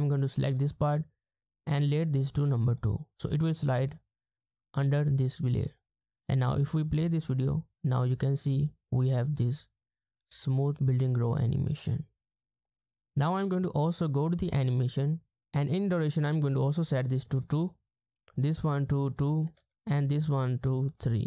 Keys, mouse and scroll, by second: 6.3 space, 7.0 space, 16.3 double click, 17.4 Return, 18.5 double click, 19.6 Return, 21.0 double click.